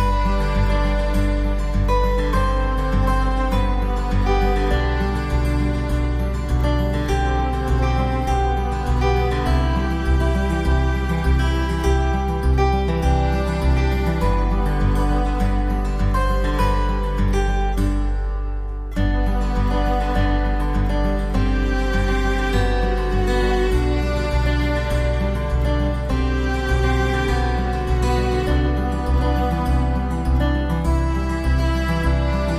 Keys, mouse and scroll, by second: 0.0 click, 0.2 middle click, 0.3-0.6 scroll up 1, 0.6 click, 0.7 click, 1.0 click, 1.2 click, 2.8 click, 2.9 middle click, 2.9 scroll down 1, 3.3 click, 3.7 click, 3.8 click, 4.1 click, 4.4 click, 4.4 click, 4.7 click, 5.1 click, 5.1 click, 5.2 Down, 5.2 click, 5.3 ctrl+z, 5.4 click, 5.6 click, 5.7 click, 5.8 click, 6.0 click, 6.3 click, 6.5 click, 7.3 alt+w, 7.6 alt+middle click, 7.8 scroll up 1, 8.0 click, 10.3 shift+click, 11.6 middle click, 11.6 middle click, 11.8 shift+click, 12.2 middle click, 12.2 scroll down 1, 12.8 click, 13.8 alt+middle click, 13.9 scroll up 1, 14.1 click, 14.3 alt+middle click, 14.5 alt+middle click, 15.7 click, 15.9 typing, 16.3 click, 17.2 alt+w, 17.7 middle click, 17.8 middle click, 17.9 scroll down 1, 18.2 alt+w, 18.7 middle click, 18.7 scroll down 1, 19.0 alt+middle click, 19.3 s, 19.6 shift+click, 19.8 shift+click, 20.1 scroll up 1, 20.5 s, 20.9 click, 21.2 click, 21.4 alt+middle click, 21.5 alt+middle click, 21.6 alt+middle click, 21.7 alt+middle click, 21.9 click, 22.1 click, 22.2 click, 22.4 click, 23.7-24.1 typing, 24.7 click, 32.3 w, 32.4 click.